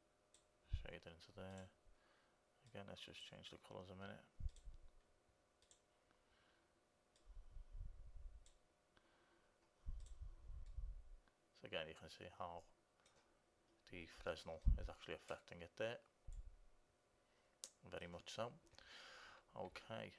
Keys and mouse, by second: 1.8-9.4 drag, 11.0-12.7 middle drag, 15.0 middle click, 20.0-20.1 middle drag.